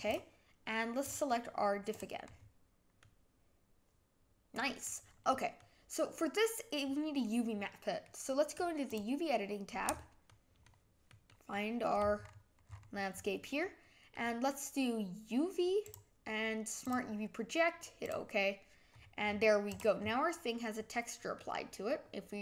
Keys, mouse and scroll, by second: 2.3-3.0 scroll up 6, 3.0-5.3 middle drag, 5.3 scroll down 1, 5.6-8.9 middle drag, 8.9-10.3 drag, 10.3-12.6 middle drag, 13.6-18.4 middle drag, 18.4 click.